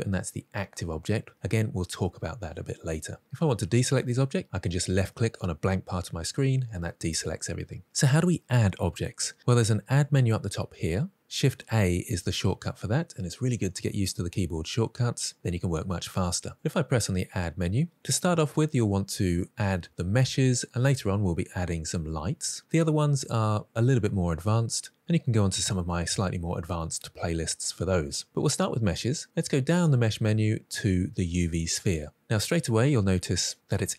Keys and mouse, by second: 16.5-31.3 drag.